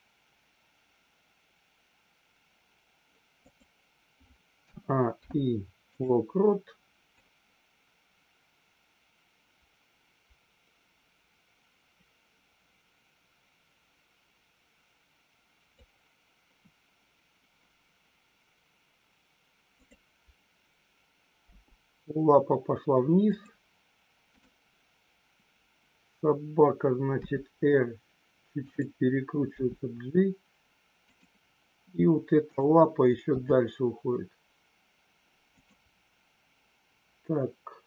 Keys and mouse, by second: 5.2 i, 7.2-15.8 drag, 19.8 click, 23.3 click, 24.3 click, 27.2 r, 28.6 click, 29.4 g, 31.0 click, 32.4 click, 33.3 g, 35.5 click.